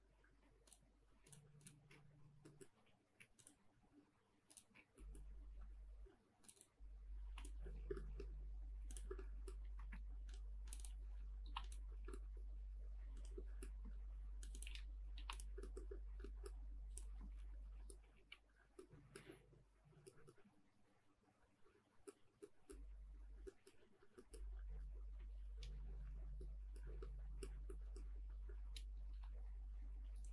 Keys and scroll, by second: 2.7 m, 5.2 space, 7.2 p, 9.7 space, 9.8 Escape, 11.4 p, 13.6 space, 13.8 Escape, 17.0 space, 17.2 Escape, 18.1 ctrl+s.